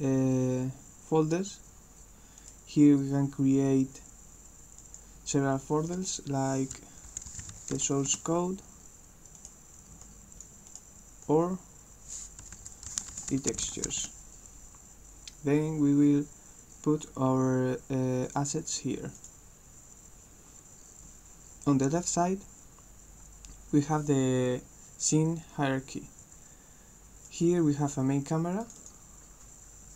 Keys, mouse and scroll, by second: 2.4 right click, 4.8 click, 7.2 shift+s, 9.3 right click, 10.2 click, 10.7 right click, 11.2 click, 13.9 s, 18.4 click, 18.8 click, 27.3 click, 28.7 click, 28.9 click.